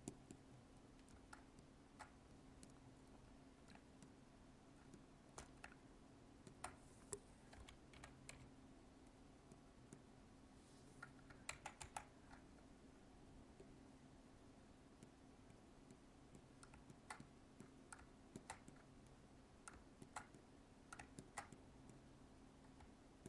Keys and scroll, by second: 1.3 alt+space, 11.4 ctrl+z.